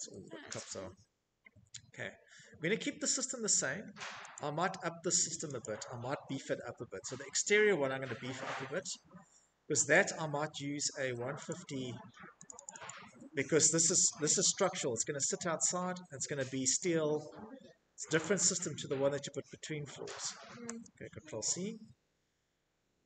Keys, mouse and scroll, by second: 3.0 click, 3.2 middle click, 3.8 click, 6.9 middle click, 8.1 click, 8.9 middle click, 9.7 click, 10.7 click, 10.9 click, 11.1 click, 12.3 a, 15.0 click, 16.4 click, 18.3 click, 18.9 c, 22.6 c.